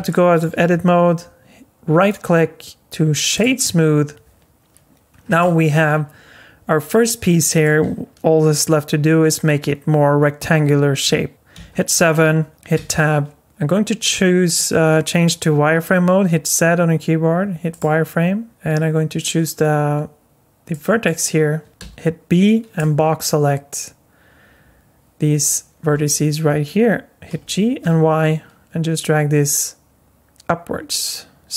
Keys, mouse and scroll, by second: 0.1 middle click, 0.6 scroll up 4, 2.0 right click, 5.2 scroll down 2, 5.4 alt+middle click, 11.5 KP_7, 12.7 Tab, 14.7 z, 20.7 click, 21.8 b, 27.3 g.